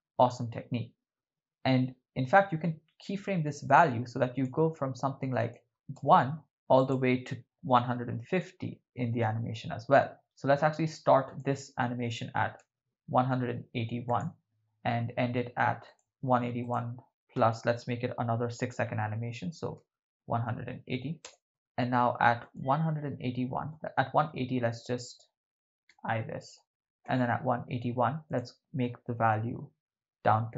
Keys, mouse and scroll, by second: 3.7 click, 5.5 click, 5.7 0, 5.7 BackSpace, 6.8-9.4 drag, 10.2 middle click, 11.3-13.3 drag, 14.1 click, 15.9-21.2 drag, 21.5 shift+space, 21.7 shift+space, 22.6 click, 23.9 Left, 26.1 i, 27.2 Right, 28.3-30.5 drag.